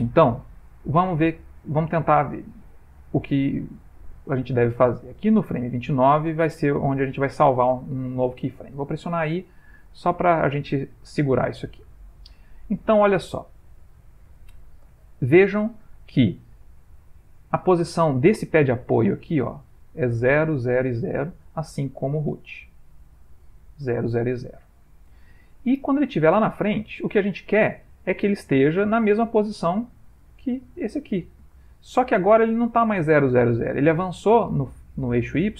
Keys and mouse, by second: 8.8 i, 11.4 click, 14.5 ctrl+middle click, 14.6 ctrl+middle click, 15.0 shift+middle click, 15.4 middle click, 16.1 shift+middle click, 18.0 click, 23.4 click, 25.2 ctrl+middle click, 26.4 ctrl+middle click, 26.8 click.